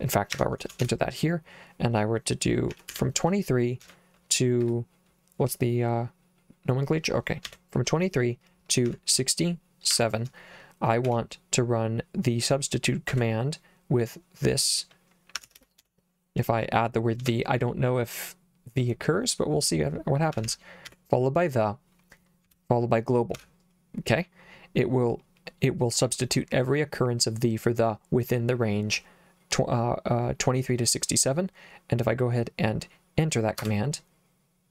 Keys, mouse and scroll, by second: 0.4 Escape, 0.8 shift+;, 2.5-4.6 typing, 7.5 ,, 8.9 6, 9.9 7, 11.1 s, 13.1 /, 15.2-17.2 typing, 20.1-21.4 typing, 22.5 /, 23.4 g, 33.7 Return.